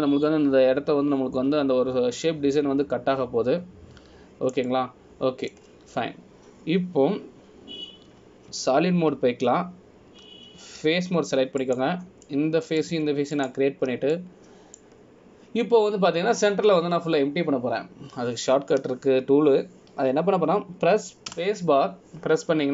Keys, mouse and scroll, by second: 5.3 scroll down 1, 6.8 middle click, 7.8 scroll down 1, 8.3 scroll down 2, 10.7 z, 13.0 3, 13.8 click, 14.4 middle click, 15.5 shift+click, 16.3 middle click.